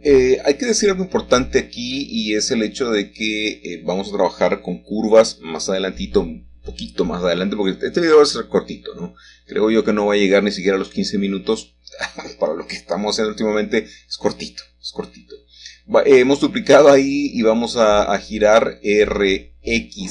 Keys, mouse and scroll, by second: 1.1-2.1 scroll up 1, 2.1-2.7 scroll up 1, 2.7 z, 3.8 click, 5.6 shift+middle click, 6.7 shift+middle click, 7.4-8.5 shift+middle drag, 11.4 typing, 12.7 typing, 13.4 Escape, 15.7 r, 17.0 typing, 17.4 Return, 18.5-19.0 typing.